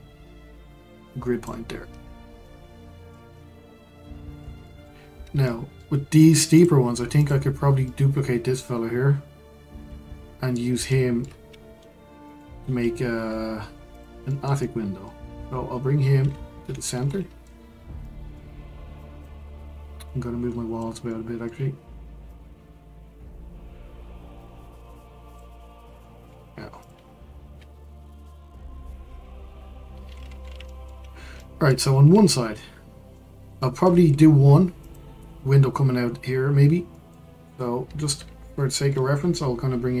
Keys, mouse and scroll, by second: 1.9-2.4 scroll down 4, 2.4-5.0 middle drag, 5.0-5.4 scroll up 1, 5.4-6.0 shift+middle drag, 6.0-6.5 scroll up 1, 6.5 click, 7.2 click, 7.9-10.9 middle drag, 11.8 shift+d, 14.3-16.6 middle drag, 16.6 alt+g, 17.1-17.7 middle drag, 17.7-18.0 scroll down 2, 18.0-19.0 middle drag, 19.0 click, 20.0 drag, 21.1-22.3 middle drag, 22.3 click, 26.0-26.8 middle drag, 26.8 click, 27.8 alt+g, 30.1-30.7 scroll up 2, 30.7-31.1 shift+middle drag, 31.1 scroll up 1, 31.3-32.0 middle drag, 32.0-32.6 scroll up 1, 32.6-34.0 middle drag, 34.0-34.8 scroll up 2, 34.8 click, 36.9-37.3 middle drag, 37.3-38.5 scroll down 2, 38.5-40.0 middle drag.